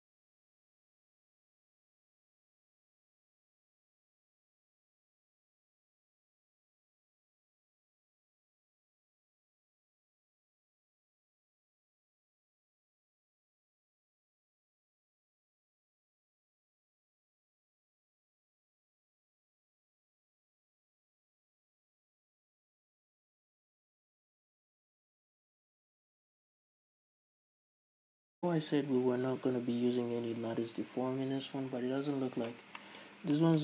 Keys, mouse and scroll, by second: 0.1 x, 0.3 a, 0.3 scroll up 2, 0.5 scroll down 2, 0.6 click, 1.2-2.4 middle drag, 1.3-2.1 scroll up 3, 1.8-4.3 typing, 2.4 click, 2.5 right click, 2.7 scroll up 2, 2.9 shift+middle click, 3.0 click, 3.1 shift+middle click, 3.6 middle click, 3.7 scroll up 2, 3.8-4.1 scroll down 2, 4.1 right click, 4.3 middle click, 4.7-5.1 scroll up 2, 5.2 click, 5.2 shift+right click, 5.4 middle click, 5.4 o, 5.5 scroll down 2, 5.7 click, 6.1-6.5 scroll down 2, 6.2-7.4 middle drag, 6.5 scroll up 2, 7.2 scroll down 2, 7.4 right click, 7.6-15.9 typing, 8.3 scroll up 1, 8.4 click, 8.9 scroll up 1, 9.1 middle click, 10.0 shift+click, 10.3 middle click, 10.4 right click, 10.7 middle click, 10.8 click, 10.9-14.4 middle drag, 13.2 ctrl+z, 14.4 right click, 14.9 shift+click, 15.1 ctrl+z, 15.1-16.1 middle drag, 16.1 right click, 16.4 Tab, 16.4-18.0 middle drag, 17.6-20.6 typing, 17.9 Tab, 18.0 right click, 18.3 middle click, 18.3 scroll up 2, 18.8 click, 19.1 shift+middle click, 19.9 click, 20.2 click, 20.5 shift+middle click, 20.8 click, 21.1-22.3 shift+middle drag, 21.2-21.5 scroll up 4, 21.8-22.1 scroll down 2, 22.1 scroll up 1, 22.3 click, 22.6 middle click, 22.9 z, 23.0 right click, 23.1 x, 23.2 shift+middle click, 23.3 click, 23.5 x, 23.6 shift+middle click, 23.7 click, 23.9 x, 24.0 click, 24.1 ctrl+z, 24.3 scroll down 2, 24.5 Tab, 24.5 middle click, 25.0 x, 25.1 shift+middle click, 25.3 click, 25.7 shift+middle click, 26.0 x, 26.1-26.7 scroll down 3, 26.3 Tab, 26.3-27.6 middle drag, 26.7 scroll up 2, 26.9 e, 27.4-28.5 scroll down 5, 27.5 Tab, 27.6 click, 27.9-33.6 shift+middle drag, 33.4 scroll up 1.